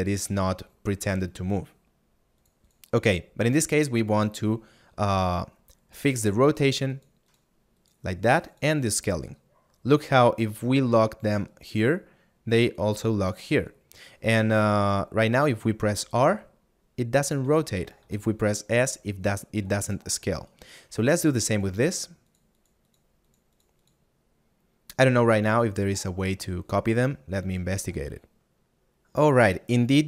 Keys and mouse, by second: 7.4 click, 17.5 right click, 20.4 right click.